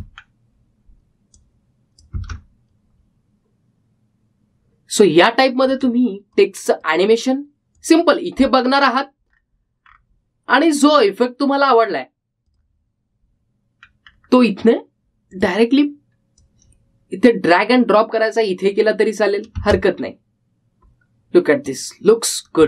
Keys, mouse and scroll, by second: 0.9 space, 1.4-2.2 scroll down 1, 2.5 click, 3.3 space, 6.8 space, 7.5-8.9 drag, 9.8-10.5 scroll down 1, 13.6 click, 15.0-16.5 scroll down 1, 16.5-20.7 drag, 20.7 space.